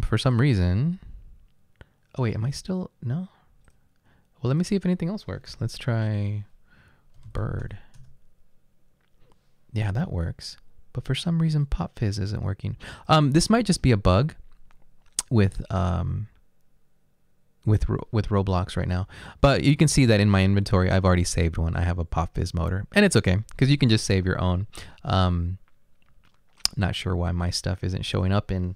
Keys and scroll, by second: 6.0-8.1 typing, 10.0-10.7 typing.